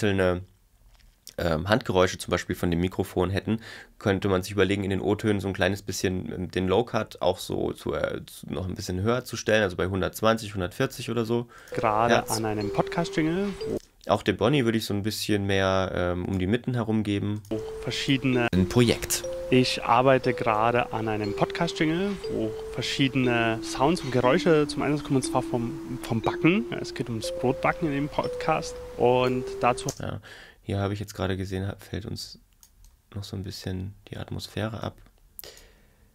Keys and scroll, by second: 11.7 space, 13.7 space, 17.5 space, 29.9 space.